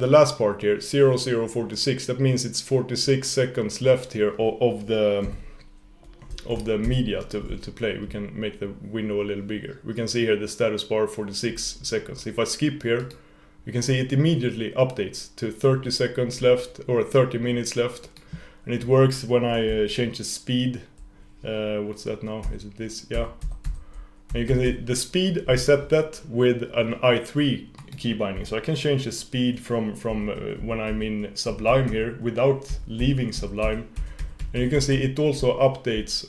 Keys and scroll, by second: 6.9 shift+super+p, 22.4 super+=, 24.4 super+-, 31.9 super+=, 32.7 super+-, 33.4 super+=.